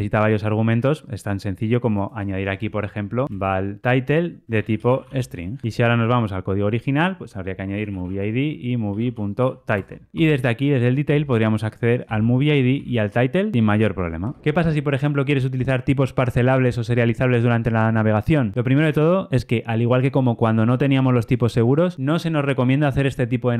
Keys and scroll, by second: 0.3 super+b, 5.2 Escape, 5.6 super+[, 5.6 ctrl+alt+Left, 9.7 Return, 14.4 Escape.